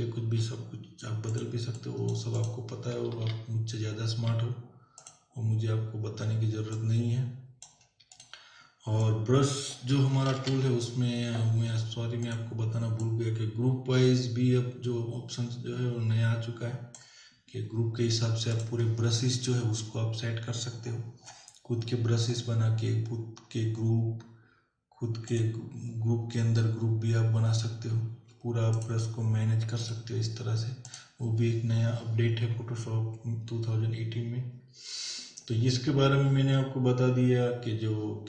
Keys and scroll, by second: 0.0 ], 2.9 ], 10.3 ctrl+z, 31.9 ctrl+z.